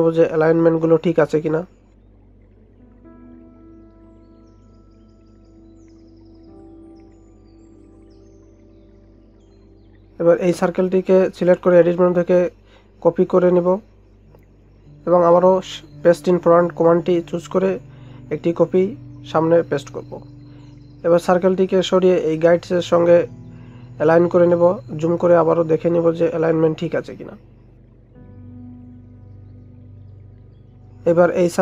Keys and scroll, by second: 8.1 ctrl+0.